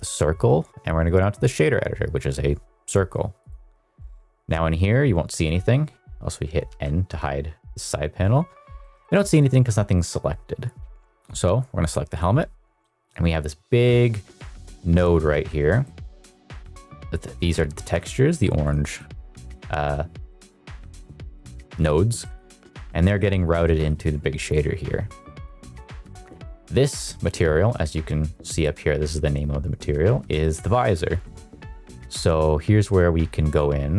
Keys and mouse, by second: 6.6 n, 7.0 n, 7.4 n, 8.7-9.1 shift+middle drag, 9.2 middle click, 11.8 click, 12.8 middle click, 13.6 middle drag, 14.3 middle click, 15.8 middle click, 16.6 middle drag, 18.6 drag, 18.8 middle click, 19.4 click, 20.2 middle click, 20.9 middle click, 21.3 middle click, 22.2 middle click, 22.6 middle click, 23.0 middle click, 23.6 middle click, 24.4 middle click, 25.2 shift+middle click, 25.6 middle click, 25.9 shift+middle click, 27.0 middle click, 31.3 middle click, 32.1 click.